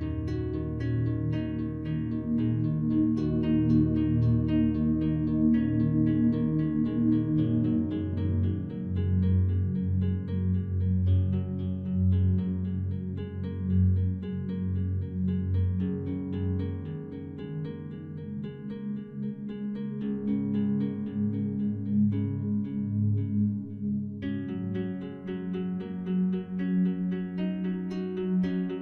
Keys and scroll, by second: 4.2 ctrl+t.